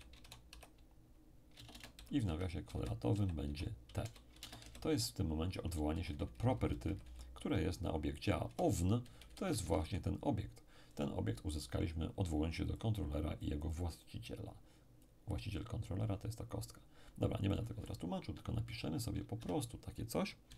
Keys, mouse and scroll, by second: 0.0-0.5 typing, 1.5-4.6 typing, 5.9 shift+Left, 6.1 shift+Left, 6.2 shift+Left, 8.4 Right, 8.8 Left, 9.1 Left, 12.7-15.9 drag, 17.5 click, 19.3 Home.